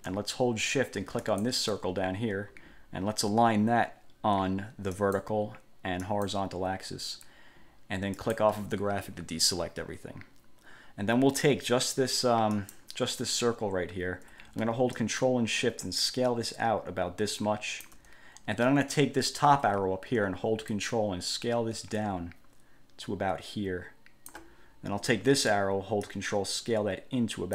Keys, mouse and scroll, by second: 1.4 shift+click, 5.1 click, 6.2 click, 8.4 click, 12.7 click, 15.1-18.2 ctrl+shift+drag, 20.9-24.6 ctrl+drag, 26.2-27.5 ctrl+drag.